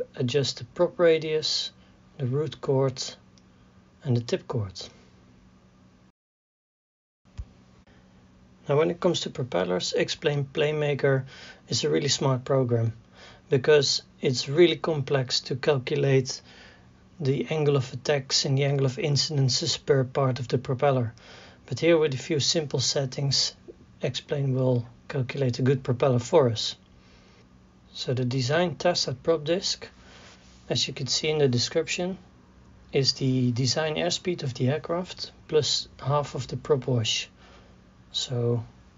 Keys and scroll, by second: 37.8 shift++, 38.6 +.